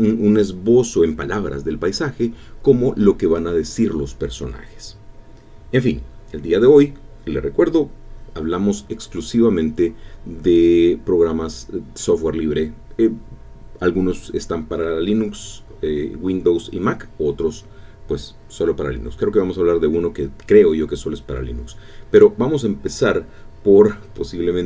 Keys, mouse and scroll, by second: 23.6 alt+F2.